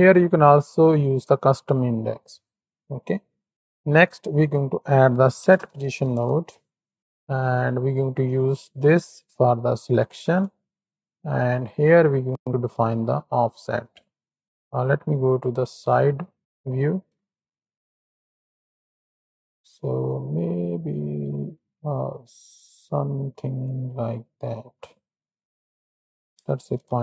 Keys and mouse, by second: 1.1-1.7 middle drag, 2.2-3.5 drag, 3.5 x, 3.8 shift+a, 7.2 click, 8.8-10.1 drag, 11.4-13.8 shift+drag, 15.2 KP_3, 15.8 ctrl+KP_1, 16.4 KP_3, 17.6 shift+drag, 18.6 shift+click, 19.9-24.3 shift+drag, 25.8-27.0 drag.